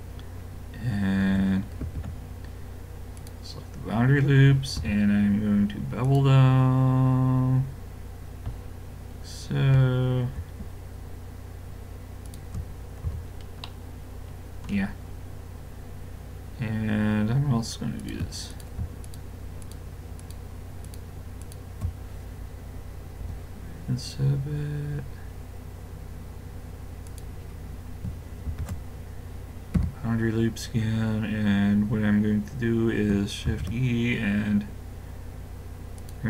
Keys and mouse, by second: 1.8 ctrl+e, 4.8 w, 13.1 a, 13.3-16.2 middle drag, 18.0-23.3 drag, 23.2 i, 28.5 ctrl+e, 33.5 shift+e.